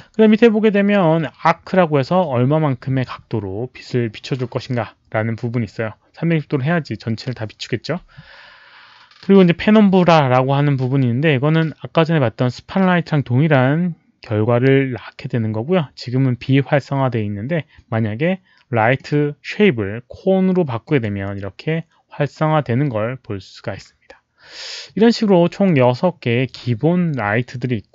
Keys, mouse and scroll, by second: 18.9 click, 20.8 click, 24.9-25.6 drag.